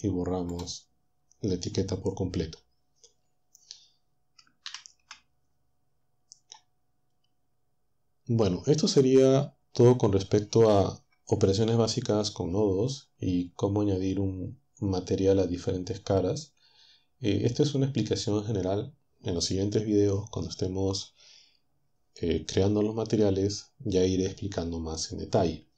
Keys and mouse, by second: 4.9 ctrl+Down.